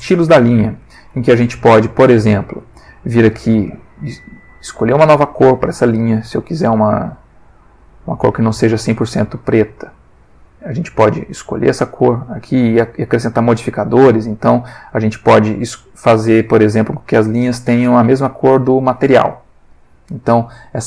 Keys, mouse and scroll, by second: 3.6 click, 5.0 click, 7.4 click, 8.7-10.6 drag, 11.5 middle click, 12.7 click, 16.6 click, 18.2 middle click.